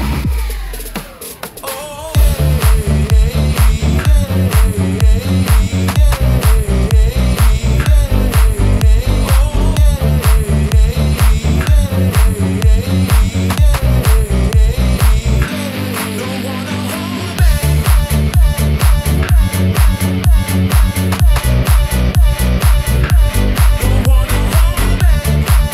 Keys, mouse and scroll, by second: 1.8 alt+z, 2.4 scroll up 2, 3.2 Tab, 4.9 1, 5.4-6.6 drag, 8.5 click, 10.5 g, 10.9 x, 13.1 click, 14.0 click, 15.4 g, 16.5 click, 18.5-19.5 drag, 20.6 click, 22.2 g, 22.6 y, 24.0 click, 24.2 Tab, 24.2 click, 24.7 scroll down 1, 25.0 middle click.